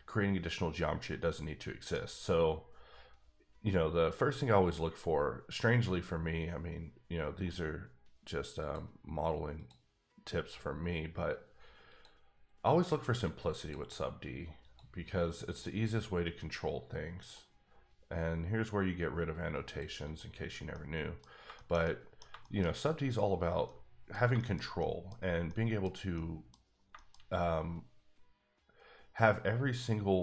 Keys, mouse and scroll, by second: 1.8 right click, 8.6 click, 9.5 click, 13.6 click, 15.4 click, 17.2 click, 20.0 click, 20.7 middle click, 21.3 scroll up 2, 21.5 shift+middle click, 21.8 double middle click, 22.4 shift+middle click, 22.8-23.3 scroll up 1, 23.3 scroll down 2, 23.5 scroll up 1, 23.6 middle click, 24.5 shift+scroll down 2, 24.8 middle click, 25.5 middle click, 26.1 middle click, 26.6 scroll up 2, 26.9 shift+middle click.